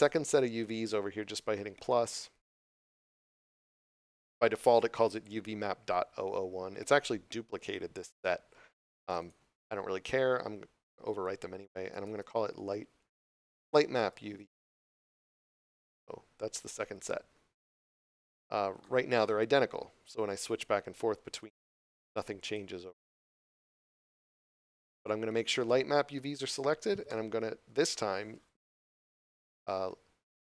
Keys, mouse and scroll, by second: 2.7 click, 9.0 click, 11.9 i, 15.0 Return, 21.3 click.